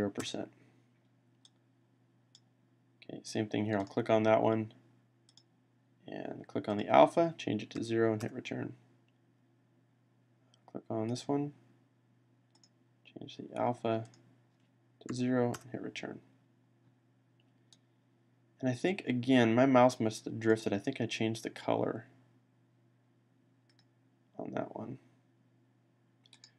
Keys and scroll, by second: 7.6 o, 15.0 0.